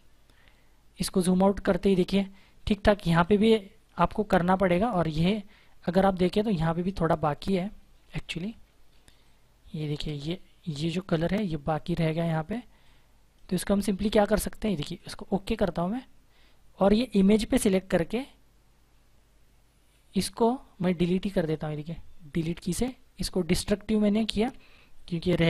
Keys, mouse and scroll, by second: 0.5 ctrl+-, 2.9 space, 3.1 click, 3.4 space, 5.9-6.2 typing, 7.3 ctrl+=, 7.9 ctrl+=, 8.8 space, 9.2 click, 9.3 space, 10.8 ctrl+=, 12.3 space, 14.8 click, 21.3 click, 24.3 ctrl+d.